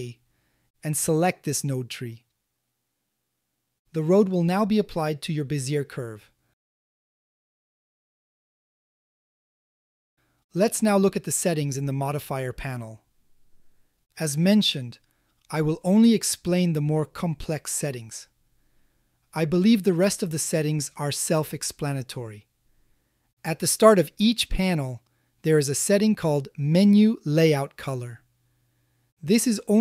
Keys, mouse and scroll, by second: 3.2 shift+middle drag, 3.8-4.4 middle drag, 4.8 Tab, 5.3 click, 5.8 g, 6.1 shift+z, 6.9 click, 7.6 r, 8.2 z, 9.7 click, 10.3 Tab, 13.6-15.0 drag, 17.1 a, 17.3 a, 18.0 middle click, 18.9-19.4 shift+middle drag, 19.7-21.5 ctrl+middle drag, 21.9-22.5 shift+middle drag, 22.6-24.1 middle drag, 24.4 shift+middle click, 29.4 click.